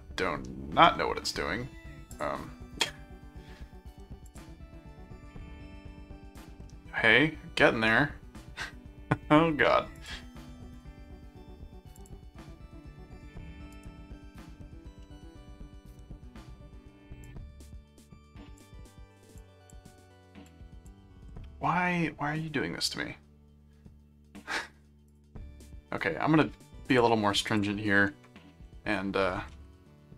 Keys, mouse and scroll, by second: 2.1 click, 4.3 click, 6.6-9.2 middle drag, 9.9 click, 12.0 click, 13.7 right click, 15.0-16.3 middle drag, 17.2 click, 19.4 click, 20.4 click, 25.1 click, 26.9 click, 27.6 ctrl+click, 28.1 ctrl+1, 29.3 ctrl+7.